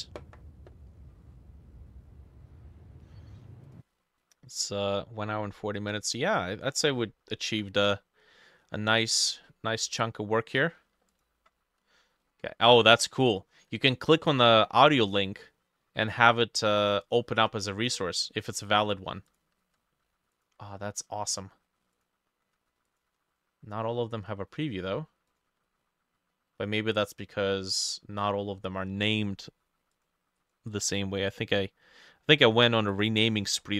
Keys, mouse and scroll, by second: 6.1 middle click, 9.3-10.9 scroll up 3, 11.1 ctrl+click, 13.8-15.2 ctrl+drag, 16.7-17.8 ctrl+drag, 18.9-20.0 ctrl+middle drag, 19.3 ctrl+click, 20.1 ctrl+middle click, 20.4 ctrl+click, 21.4-23.4 ctrl+middle drag, 22.0 ctrl+click, 22.9 ctrl+click, 25.0 ctrl+middle click, 25.3 ctrl+click, 30.4 double click, 30.7 double click, 33.3-33.7 scroll up 12.